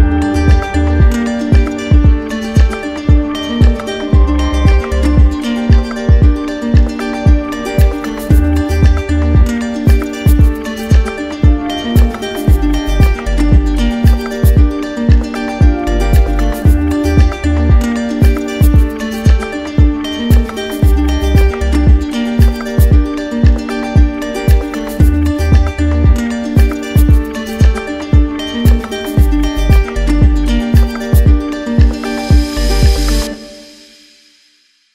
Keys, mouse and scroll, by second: 0.7 click, 1.5 right click, 2.6 alt+right click, 6.9 alt+right click, 8.8 alt+right click, 9.8 right click, 13.2 right click, 14.1 alt+right click, 14.9 shift+right click, 15.9 alt+right click, 16.9 alt+right click, 17.8 alt+right click, 21.9 click, 27.1 click, 27.9 alt+right click, 30.0 click, 33.6 click, 34.3 alt+right click.